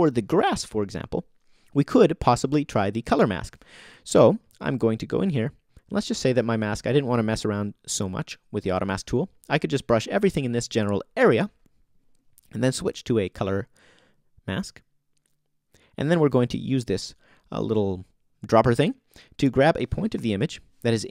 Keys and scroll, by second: 6.3 o, 20.1 o.